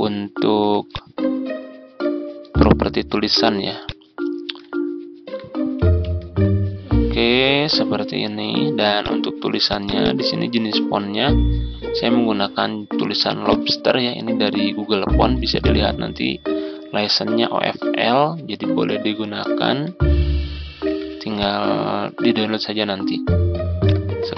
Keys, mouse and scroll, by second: 0.8-2.4 drag, 5.0 ctrl+scroll down 1, 8.9-14.3 drag, 18.7 ctrl+scroll up 1, 20.7 z, 21.2-24.3 drag.